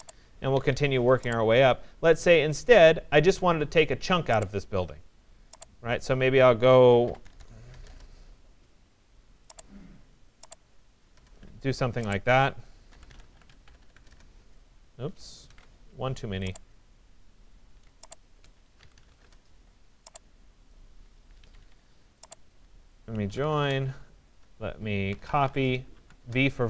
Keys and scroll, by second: 0.6 Escape, 6.6 1, 7.2 0, 7.9 Return, 15.5 ctrl+z, 19.2 Return, 21.5 Escape, 23.6 Return.